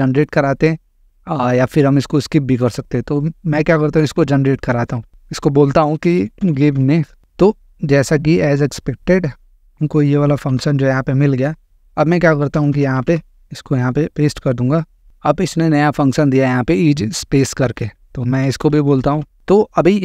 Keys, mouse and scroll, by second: 2.5-3.7 drag, 5.7-7.1 typing, 8.3 click, 10.4 ctrl+c, 11.7 click, 12.5 Return, 12.7 Return, 13.0 ctrl+v, 14.8 click, 18.5-19.6 typing.